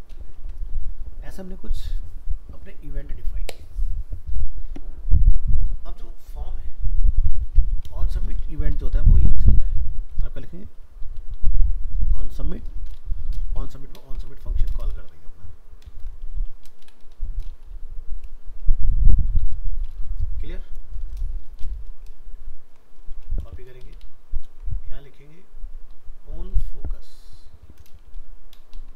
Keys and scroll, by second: 0.4 ctrl+s, 22.2 ctrl+shift+Left, 23.4 ctrl+c, 24.5 ctrl+v.